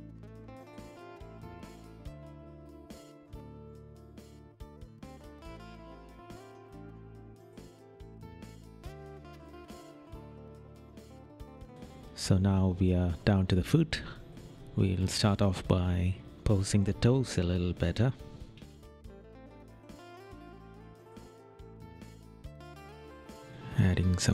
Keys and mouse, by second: 1.4 right click, 2.0 right click, 4.9 right click, 5.1 middle click, 5.4 right click, 6.8 right click, 7.4 right click, 8.5 right click, 9.7 right click, 10.2 right click, 10.8 right click, 11.0 right click, 12.2 right click, 14.3 right click, 18.5 right click, 18.9 right click, 20.0 right click, 23.0 right click.